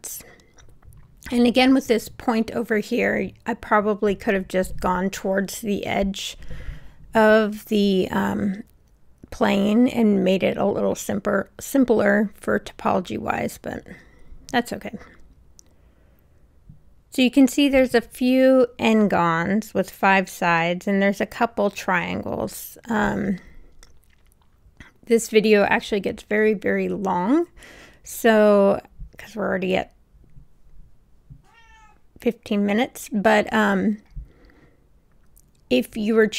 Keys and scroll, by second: 1.6 Return, 7.7 w.